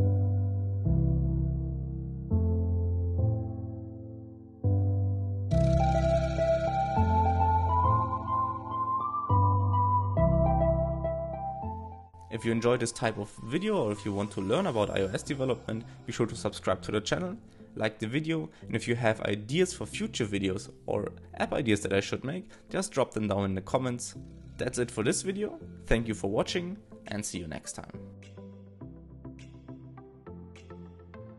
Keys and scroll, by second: 9.3 super+r, 17.6 shift+', 17.7 alt+shift+Left, 17.9 alt+shift+Right, 28.0 shift+Up, 28.1 super+r.